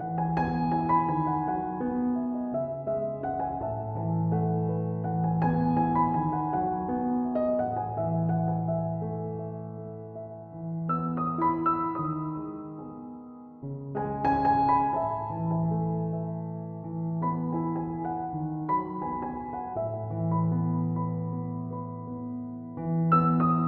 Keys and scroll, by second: 9.3 typing.